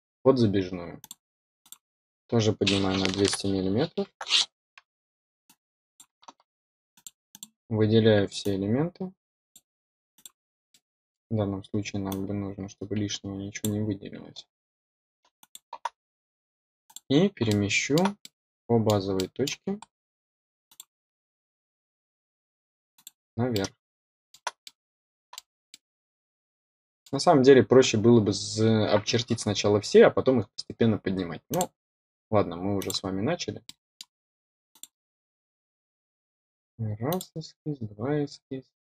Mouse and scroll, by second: 0.9 click, 1.5 click, 5.4 click, 6.9 click, 7.2 click, 8.3-9.5 drag, 10.1 click, 10.6-11.1 middle drag, 12.0-13.6 drag, 15.3 click, 16.8 click, 17.4 middle click, 18.1-18.6 middle drag, 19.1 middle click, 19.7-20.1 scroll up 1, 20.6 click, 22.9 click, 23.5 middle click, 24.6 middle click, 25.6-27.0 middle drag, 31.4 click, 32.7 click, 33.6 middle click, 34.6 click, 37.0 click.